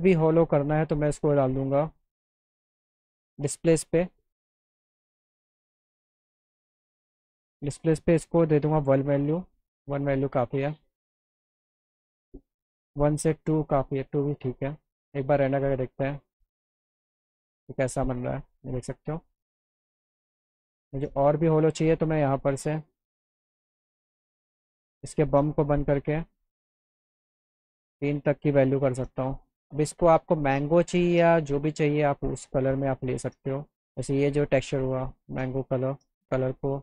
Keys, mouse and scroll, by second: 0.2 click, 1.7-2.1 scroll down 2, 2.4 click, 4.4 click, 5.8 click, 6.6 click, 7.0 click, 15.0 click, 21.0 click, 21.3 click, 22.7 click, 23.3 click, 24.0 click, 24.7 click, 25.8 click, 30.2 click, 32.0 click, 34.9 click.